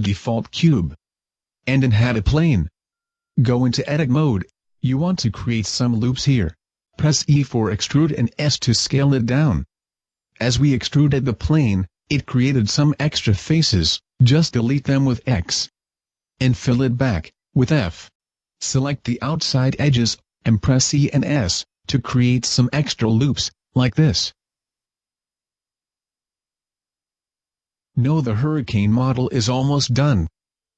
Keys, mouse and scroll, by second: 0.2 x, 1.5 shift+a, 2.8 middle click, 3.3 scroll up 1, 4.0 Tab, 5.1 click, 5.9 o, 8.2 e, 8.4 click, 9.4 s, 9.6 click, 9.8-10.6 scroll up 1, 10.6-11.6 scroll up 1, 10.6 x, 11.9 right click, 12.3 x, 14.6 click, 15.2 right click, 15.6 shift+right click, 16.4 f, 17.1-17.5 scroll down 2, 17.6 alt+right click, 18.4 e, 18.6 click, 18.8 s, 19.4 click, 19.6 e, 20.4 right click, 20.7 s, 21.6 click, 21.8-22.2 scroll down 3, 22.2 e, 23.1 click, 23.4 e, 24.4 click, 24.7 e, 26.5 click, 26.7 middle click, 28.5 space, 29.8 a, 30.2 Tab.